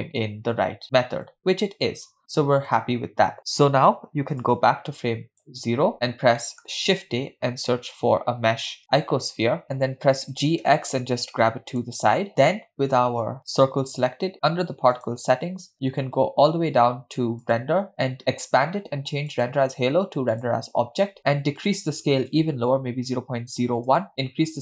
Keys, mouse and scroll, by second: 1.5 space, 4.5-5.7 drag, 5.9-6.4 scroll down 6, 6.4 middle click, 6.9 shift+a, 8.8 shift+a, 10.3 g, 12.2-12.6 scroll down 2, 14.0 click, 15.0 click, 15.7-16.9 scroll down 8, 17.5 click, 18.6 scroll down 1, 19.3-20.6 drag, 21.7-24.1 drag.